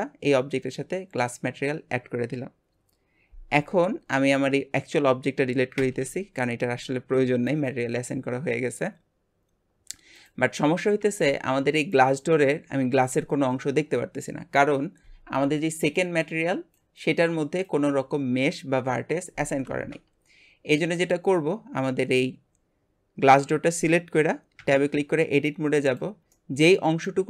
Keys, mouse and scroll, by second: 4.4 click, 7.7 x, 10.3 click, 24.7 Tab, 25.9 click, 26.3-27.2 middle drag.